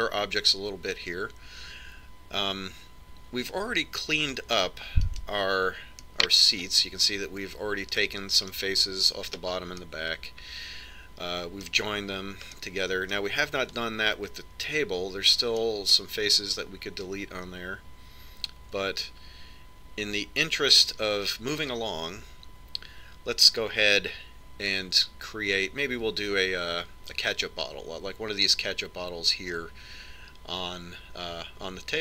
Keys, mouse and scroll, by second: 6.2 right click, 7.1 middle click, 7.7 right click, 7.9-9.1 middle drag, 10.9-12.6 middle drag, 13.7-15.3 middle drag, 16.8-18.6 middle drag.